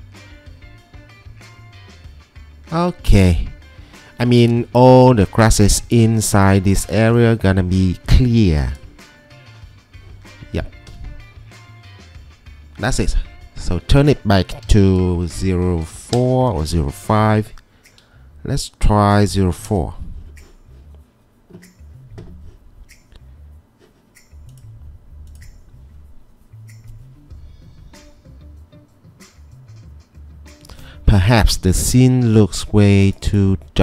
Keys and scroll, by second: 6.6 ctrl+2, 10.9 Escape, 14.5 Escape, 15.8-17.3 typing, 19.2-19.6 typing, 19.8 Return.